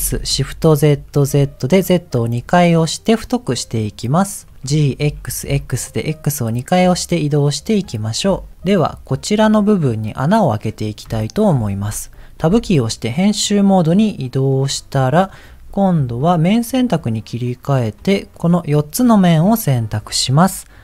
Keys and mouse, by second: 4.6 g, 8.6 middle click, 11.2 shift+middle click, 12.5 Tab, 14.1 middle click, 18.4 click.